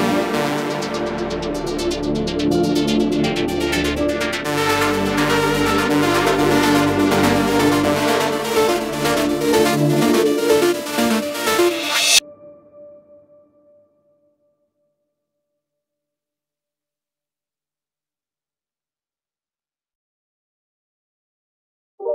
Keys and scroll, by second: 12.9 ctrl+-, 14.7 ctrl+-, 17.4 ctrl+s.